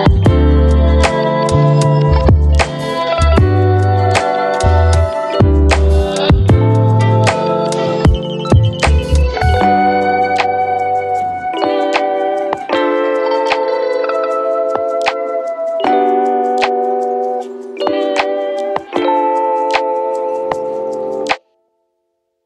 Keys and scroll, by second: 2.0 f, 10.6 z, 16.7 ctrl+d, 18.1 j.